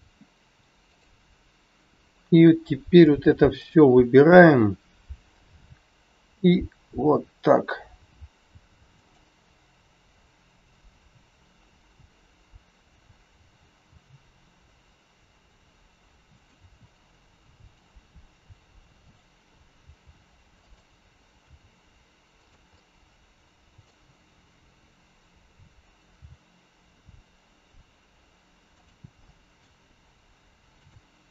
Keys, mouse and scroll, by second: 0.8 shift+click, 5.4 shift+click, 5.4 g, 17.5 click, 19.8 click, 19.8 g, 21.4 r, 22.6 middle click, 28.7 g, 29.1 middle click, 30.8 click.